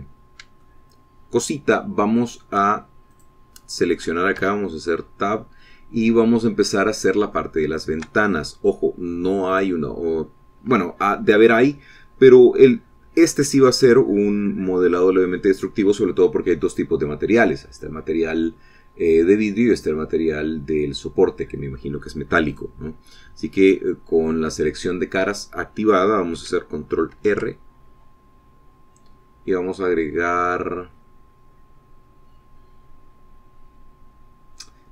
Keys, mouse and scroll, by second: 1.9-4.7 shift+drag, 5.7 Tab, 8.6 shift+click, 9.5-11.3 shift+drag, 23.8 click, 28.5 ctrl+r.